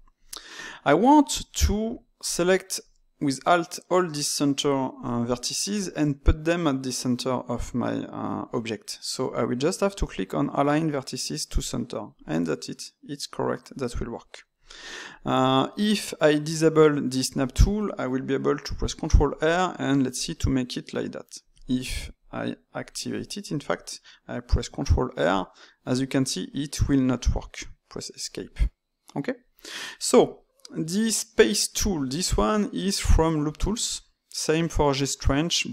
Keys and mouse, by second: 2.2 alt+click, 2.9-8.1 shift+middle drag, 11.4-14.4 drag, 18.8 ctrl+r, 22.1 click, 24.5 ctrl+r, 32.6-35.7 right drag.